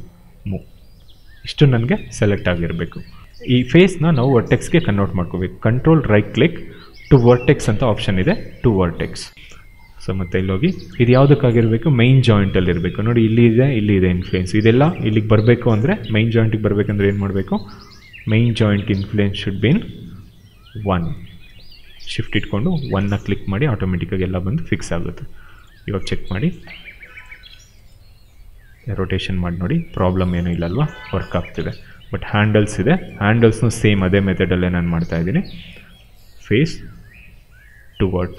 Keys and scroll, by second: 2.5 ctrl+z, 22.8 1, 23.0 Return, 28.5 e, 31.6 ctrl+z.